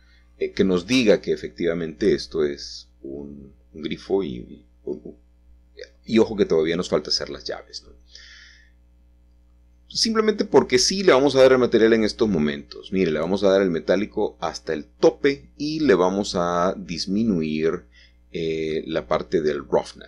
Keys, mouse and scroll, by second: 1.3 middle click, 1.6-2.6 scroll up 2, 2.6 shift+middle click, 3.2-4.2 scroll up 2, 4.2-5.3 middle drag, 5.8-8.0 drag, 7.0 middle click, 10.6 scroll up 2, 10.8 scroll down 2, 10.9 scroll up 2, 11.5 scroll up 2, 11.6-12.2 scroll down 3, 12.3-13.3 scroll up 4, 12.8 middle click, 13.3-15.3 middle drag, 15.3 click, 17.1 middle click.